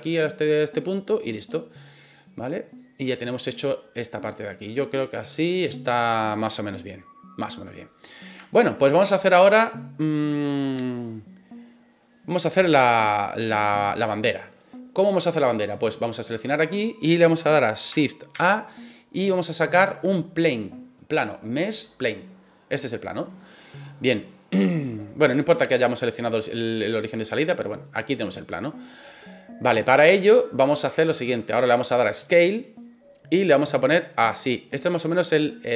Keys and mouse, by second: 0.3 middle click, 2.4 click, 3.5 right click, 4.1-4.5 middle drag, 4.9-6.4 middle drag, 7.8-8.2 middle drag, 8.4 shift+middle drag, 15.1-15.4 shift+middle drag, 16.3 click, 18.3 shift+a, 23.2 middle drag, 24.6-25.0 middle drag, 26.9 click, 27.5 middle click, 28.4 middle click, 33.7-35.7 drag.